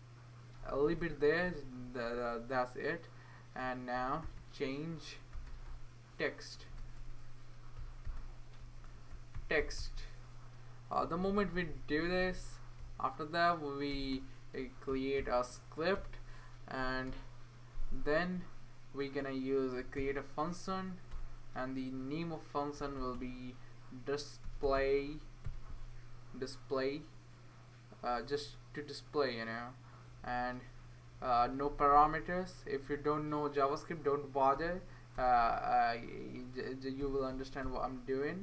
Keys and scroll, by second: 3.7-11.8 typing, 11.0 Right, 13.9 Return, 14.9 typing, 15.9 Return, 17.1 BackSpace, 17.8 Right, 19.5-20.5 typing, 21.1 Return, 22.5-25.9 typing, 30.1 Right, 30.3 Right, 31.1 Right, 31.7-33.7 Right, 32.7 Left, 34.5 shift+d, 35.1 BackSpace, 35.3 shift+d, 36.5-38.4 typing.